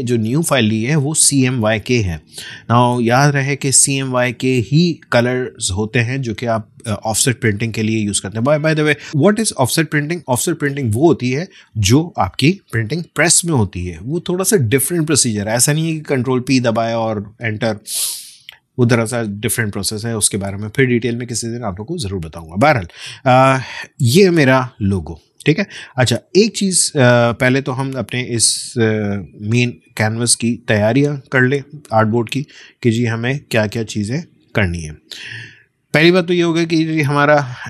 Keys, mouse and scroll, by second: 3.2-6.7 drag, 6.7 space, 7.1 click, 7.2 space, 8.0 click, 23.5-25.5 drag, 25.5 space, 25.8 click, 25.9 space, 27.3-28.8 drag, 28.8-29.1 alt+scroll down 1, 30.1-34.6 drag, 34.6-35.2 scroll up 1, 35.5 space, 35.7 click, 36.0 space.